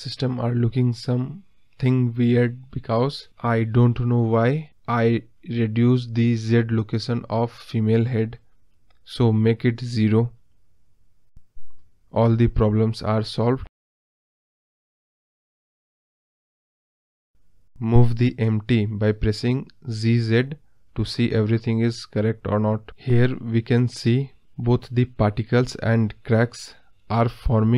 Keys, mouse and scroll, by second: 1.2 click, 4.6 click, 5.3 click, 9.3 scroll down 1, 9.4-13.1 middle drag, 13.1 click, 13.7 scroll up 3, 14.0-14.6 middle drag, 14.6-15.1 scroll down 3, 15.1-17.5 middle drag, 17.5 click, 18.2 g, 20.5-21.3 scroll up 6, 21.3-22.1 scroll down 2, 22.1 g, 26.0 click, 26.7 g.